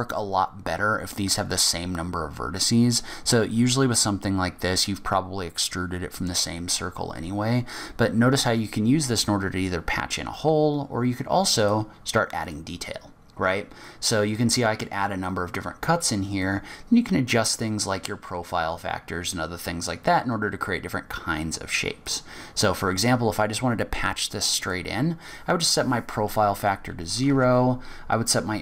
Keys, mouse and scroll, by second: 11.5 click, 12.8 click, 14.2 click, 16.4 click, 24.6 click.